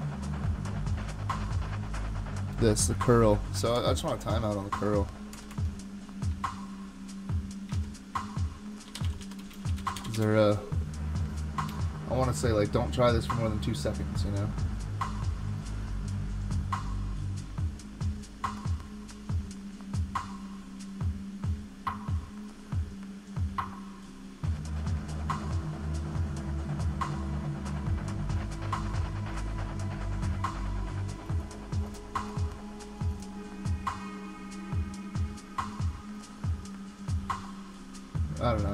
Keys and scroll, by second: 3.8 super+Tab, 5.3 super+Tab, 5.5 super+Tab, 7.7 super+t, 8.7-10.6 typing.